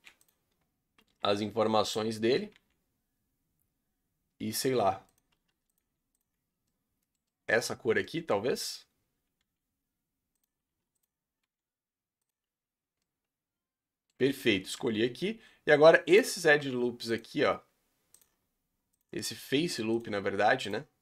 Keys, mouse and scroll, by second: 1.0 s, 2.6 g, 5.3 s, 5.8 g, 6.3 Tab, 6.7-7.6 middle drag, 7.6-8.0 scroll up 5, 8.0-8.5 middle drag, 8.5 Tab, 9.5 g, 10.7 s, 11.4 g, 12.4 Tab, 12.8 scroll down 2, 13.0-14.2 middle drag, 14.2 Tab, 14.2-15.8 scroll up 4, 14.6 shift+middle drag, 16.1 alt+click, 18.2 alt+shift+click, 18.9 alt+shift+click, 20.0 alt+shift+click, 20.7 alt+shift+click.